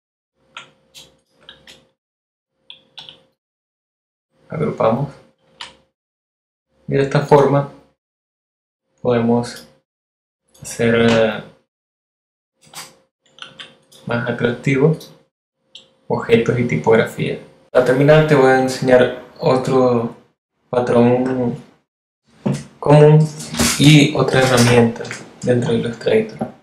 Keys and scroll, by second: 1.5 super+g, 8.7 BackSpace, 9.5 z.